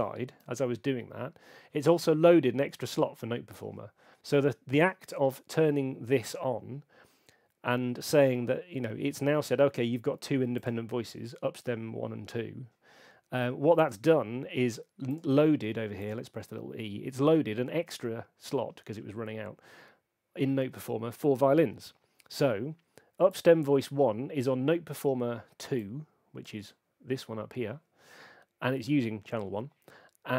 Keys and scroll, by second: 0.4 F5, 13.7 F5.